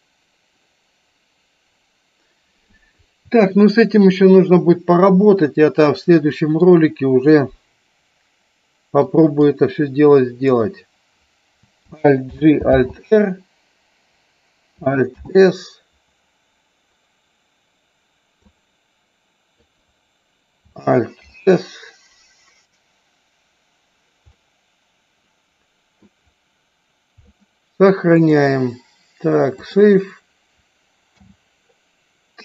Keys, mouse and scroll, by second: 0.0-2.8 middle drag, 5.4 click, 6.3 middle click, 7.4-9.2 middle drag, 9.7 click, 12.4 alt+g, 13.0 alt+r, 18.5-19.8 drag, 24.4-26.1 middle drag, 28.2-29.9 drag.